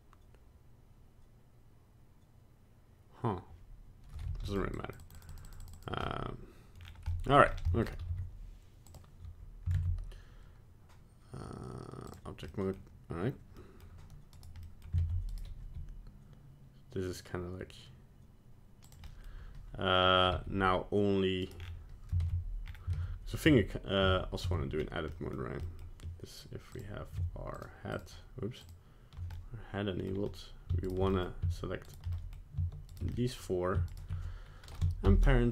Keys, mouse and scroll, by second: 4.2 f, 4.7 click, 5.0 click, 5.1 click, 5.3 click, 5.4 click, 5.6 click, 5.7 click, 6.0 middle click, 6.8-7.4 scroll down 4, 7.1 middle click, 7.5 scroll up 2, 7.7 middle click, 8.0 z, 9.7 ctrl+Tab, 12.4 middle click, 13.6 middle click, 14.3 right click, 14.6 middle click, 15.0 ctrl+Tab, 15.3 right click, 15.5 g, 19.0 middle click, 19.2 middle click, 20.3 g, 21.5 scroll down 4, 22.2 ctrl+Tab, 22.6 scroll up 3, 22.9 ctrl+Tab, 23.5 Tab, 24.0 Tab, 24.5 Tab, 24.7 scroll down 1, 25.1 middle click, 25.6 middle click, 26.7 click, 27.5 shift+click, 27.9 click, 28.6 shift+click, 29.3 middle click, 30.8 shift+right click, 31.1 middle click, 31.8 shift+right click, 32.1 middle click, 32.9 shift+right click, 33.1 middle click, 33.9 shift+right click, 35.0 ctrl+p.